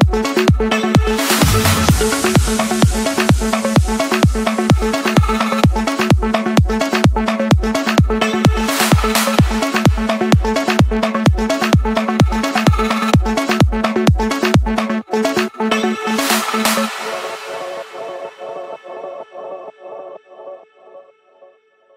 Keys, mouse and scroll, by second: 1.2-2.4 drag, 2.7 typing, 3.0 Return, 4.1-6.4 typing, 5.4 Return, 6.7 Return, 9.4 click, 10.4 Return, 11.0 Return, 11.6 scroll, 12.4-13.0 scroll, 13.0 scroll, 13.9 Return, 15.1 click, 16.1 click, 17.7 click, 18.1 Return, 18.3 Return, 18.8 scroll, 20.9 click, 21.3 middle click.